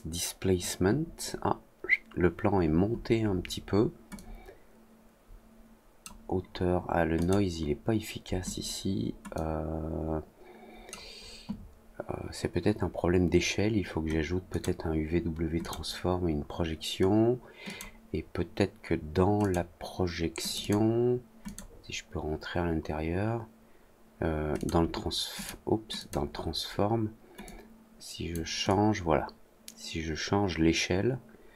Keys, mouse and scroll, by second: 4.1-6.0 drag, 7.1 click, 9.3-10.8 drag, 14.4 click, 15.5 click, 17.6 click, 19.3 click, 20.4 click, 20.5 click, 21.4 click, 24.5 click, 25.3 click, 25.9 click, 27.4-28.2 drag, 28.6-31.5 drag.